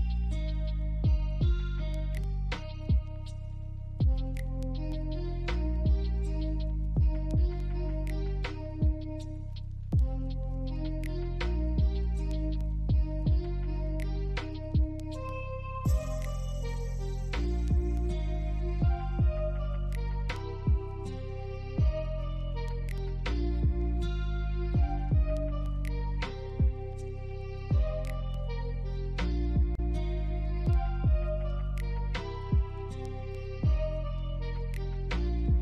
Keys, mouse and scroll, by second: 1.1 right click, 3.0 alt+click, 4.2 double click, 6.2 BackSpace, 8.2 scroll up 1, 8.6 alt+middle click, 9.1 alt+click, 9.7 scroll up 3, 10.7 alt+click, 17.1 shift+click, 17.5 alt+click, 18.6-19.1 alt+scroll up 2, 19.1 alt+click, 20.8 shift+click, 22.3 scroll down 1, 22.6 alt+click, 24.4 alt+middle click, 24.8 scroll down 4, 25.5 alt+middle click, 25.9 alt+click, 26.4 alt+middle click, 27.5 scroll down 1, 30.4 scroll down 1, 30.7 alt+middle click, 31.1 alt+scroll up 2, 34.6 scroll down 1, 35.1 alt+middle click.